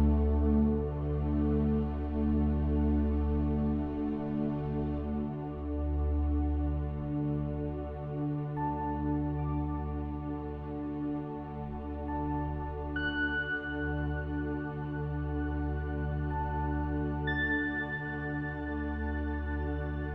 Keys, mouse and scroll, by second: 0.9 Tab, 2.6-4.5 drag, 7.6 KP_1, 11.5-17.8 drag, 19.2-20.1 drag.